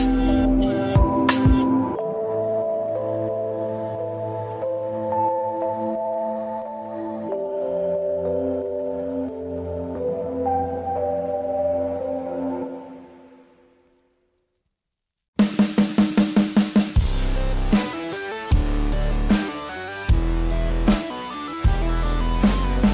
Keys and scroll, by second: 11.3 space, 12.4 space, 21.0 space, 21.8 ctrl+=, 22.5 space.